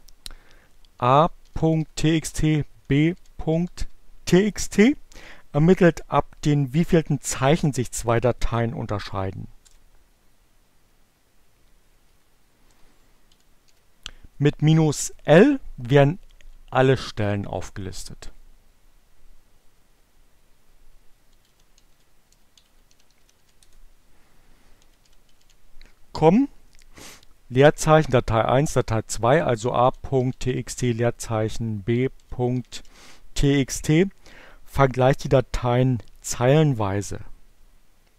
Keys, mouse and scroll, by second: 0.4-4.1 typing, 9.4 Return, 11.4 Up, 12.8 -, 13.1 l, 16.6 Return, 18.9-19.8 typing, 21.2-22.8 typing, 23.3 Return, 23.8-24.8 typing, 28.9-30.1 typing, 31.2-32.3 typing, 37.7 Return.